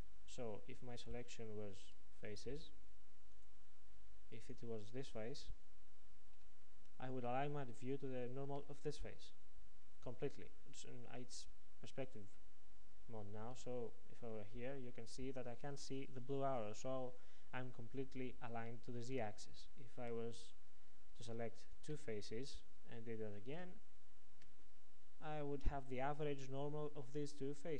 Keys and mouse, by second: 2.4 ctrl+Tab, 4.4-6.4 drag, 13.6 KP_5, 21.7-23.6 drag.